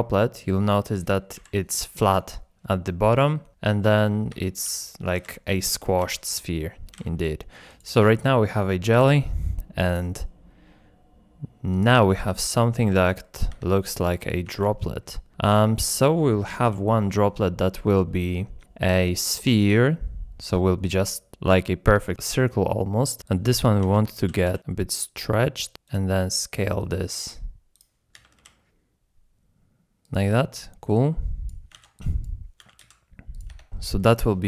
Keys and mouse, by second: 1.0 middle click, 1.3 KP_3, 4.3 Tab, 4.7 1, 5.2 alt+z, 5.5 click, 6.9 g, 6.9 z, 7.7 click, 8.9 g, 11.7 click, 12.1 middle click, 12.8 alt+z, 13.2 click, 13.5 Tab, 14.0 click, 14.5 alt+z, 14.8 drag, 16.0 click, 16.6 KP_7, 23.2 Tab, 23.2 alt+z, 23.2 1, 23.3 click, 24.3 g, 24.5 y, 25.7 s, 25.9 x, 26.4 click, 27.2-27.8 drag, 28.1 s, 28.4 x, 30.0-31.5 drag, 31.7 alt+z, 32.1 click, 32.6 s, 32.9 x, 33.3 click, 33.5 Tab, 33.8 alt+z, 34.1 click.